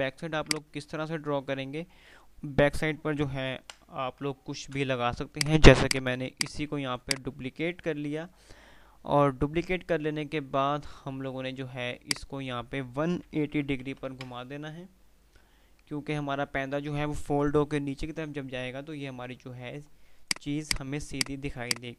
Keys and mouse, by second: 3.2 ctrl+g, 3.9 Delete, 4.8 ctrl+z, 5.5 click, 7.1 right click, 12.5 click, 20.4 click.